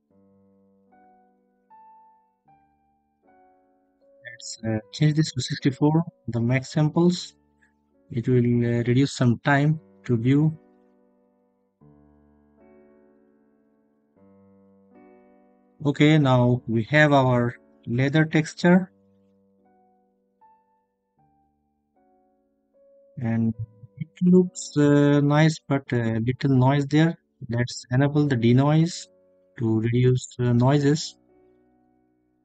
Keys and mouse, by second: 1.3-4.5 drag, 15.0 middle click, 25.3 click, 31.7 shift+a.